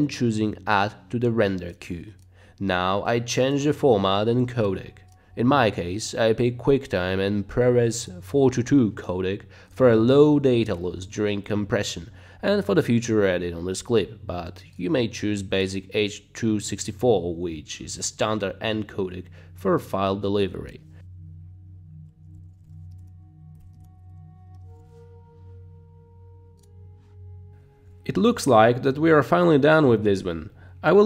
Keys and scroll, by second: 10.1 BackSpace, 10.7 BackSpace, 22.2-25.4 typing.